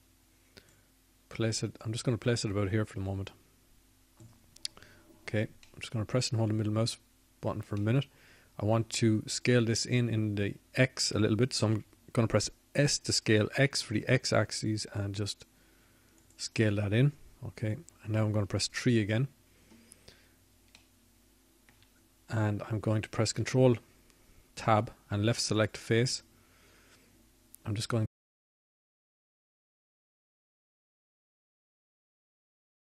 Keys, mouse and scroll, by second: 4.4-6.4 drag, 11.6-12.8 middle drag, 12.8 click, 14.3-17.6 drag, 17.6 s, 22.3 click, 24.3 KP_3, 26.8 middle click.